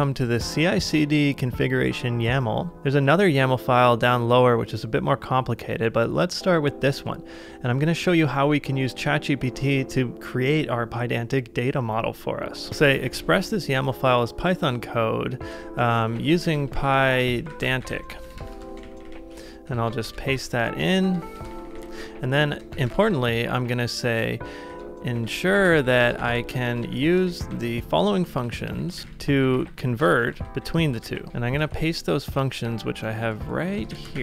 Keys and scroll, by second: 7.8 super+c, 8.0 super+c, 12.7 typing, 15.3-17.1 typing, 18.2-19.7 typing, 20.1 shift+Return, 20.3 super+v, 21.3 shift+Return, 21.7 typing, 22.7 shift+Return, 24.4-26.3 typing, 28.2-29.5 typing, 31.3 shift+Return, 31.7 super+Tab, 33.6 ctrl+c, 33.9 shift+v.